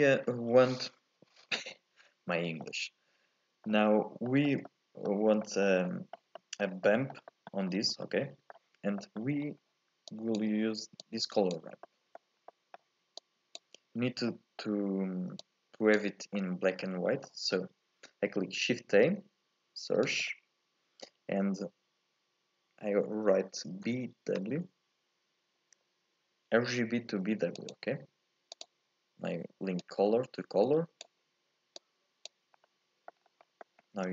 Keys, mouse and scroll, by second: 0.0-2.6 scroll up 2, 2.6-7.7 middle drag, 7.7-8.0 scroll down 1, 8.0-9.4 middle drag, 9.4-10.1 scroll up 4, 10.1 click, 11.0 click, 11.8-13.2 middle drag, 13.2 click, 13.9-14.3 scroll up 1, 14.3-15.4 middle drag, 15.4 click, 16.3 scroll up 1, 16.4 middle click, 16.8 scroll down 1, 17.1-18.8 middle drag, 18.8 shift+a, 29.8 click, 31.8 click, 32.6 middle click, 33.2 scroll down 2, 33.4 middle click, 33.8-34.1 scroll up 1.